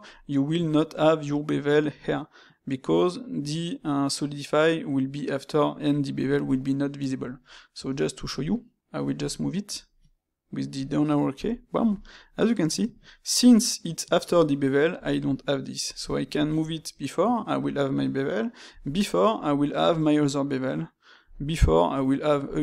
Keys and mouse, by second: 0.1-3.1 middle drag, 7.7 space, 9.2-12.2 shift+middle drag.